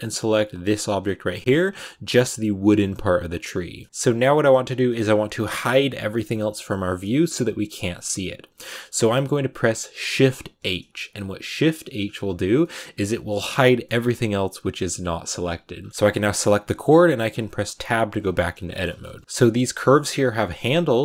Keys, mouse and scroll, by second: 0.5 shift+right click, 1.2 middle click, 1.4-3.2 scroll up 2, 3.8 ctrl+z, 10.4 shift+h, 12.0-12.5 scroll down 4, 12.5 middle click, 12.8 a, 13.7-15.6 middle drag, 15.6 scroll down 2, 15.9-16.5 scroll up 3, 16.0 middle click, 16.5-17.6 middle drag, 17.6 Tab, 18.2 right click, 18.5 shift+middle click, 19.2 scroll down 1, 19.2 middle click, 20.0 r.